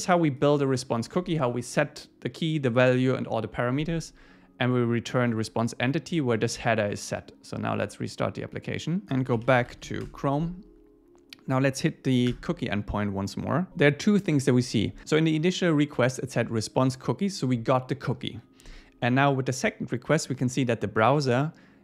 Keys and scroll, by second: 10.0 Return, 12.3 Return.